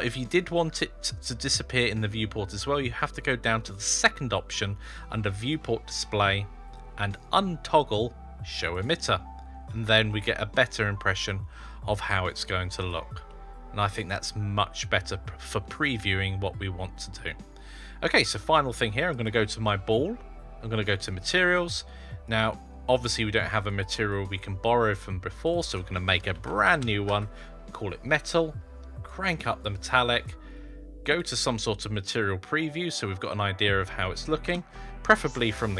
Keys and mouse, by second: 5.2 click, 8.6 click, 9.9-11.0 middle drag, 12.7 click, 13.1-15.4 middle drag, 17.0-17.4 middle drag, 18.9 click, 20.7 click, 23.5 click, 24.0 click, 25.2 click, 25.4-27.9 drag, 29.0 click, 31.0 click, 34.3 KP_0.